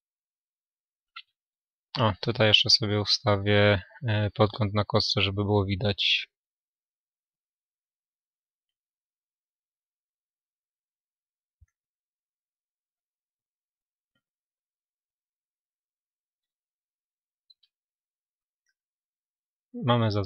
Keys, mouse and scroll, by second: 1.4 n, 9.6-13.4 drag, 13.4 n, 15.7-20.2 middle drag.